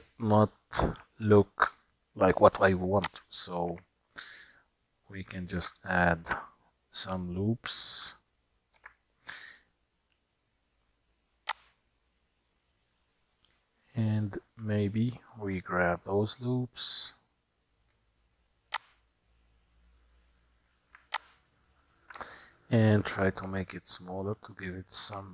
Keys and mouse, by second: 3.1 click, 3.8 Tab, 5.6 ctrl+r, 14.2 middle click, 18.8 shift+click, 23.5 s.